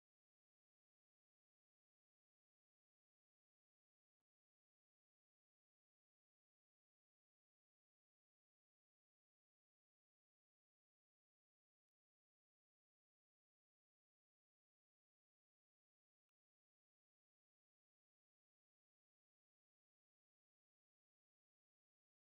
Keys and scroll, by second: 1.8-4.5 typing, 5.1 ctrl+d, 12.6 ctrl+g, 13.2 ctrl+d, 16.1 ctrl+s.